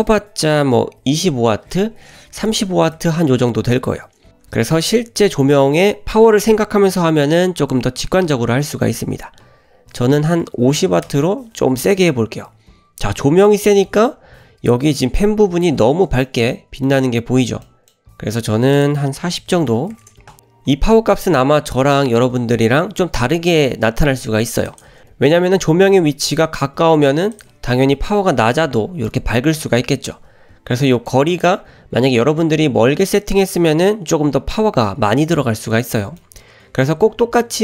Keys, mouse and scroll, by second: 2.5 BackSpace, 2.6 BackSpace, 12.1-13.3 scroll up 1, 13.3-13.8 scroll up 3, 13.9 shift+middle click, 14.2 scroll up 1, 15.2-15.7 middle drag, 16.3 shift+middle drag, 16.6-16.9 middle drag, 17.3-18.8 scroll down 4, 17.7 middle drag, 18.8-20.4 drag, 21.0 drag, 24.7 click, 25.3 drag, 25.8 `, 26.6 g, 30.2 g, 36.2 shift+middle drag.